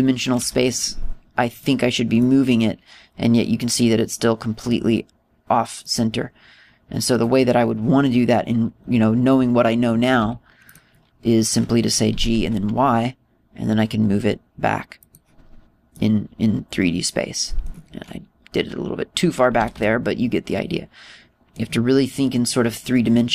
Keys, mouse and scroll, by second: 0.4 click, 1.4 g, 2.7 click, 3.2 middle click, 6.9 middle click, 9.7 scroll up 1, 9.8-11.2 scroll down 2, 11.2-11.6 scroll down 1, 11.2 g, 11.8 click, 13.1 g, 16.2 click, 17.0 middle click, 20.6 g, 22.1 click, 22.1 middle click.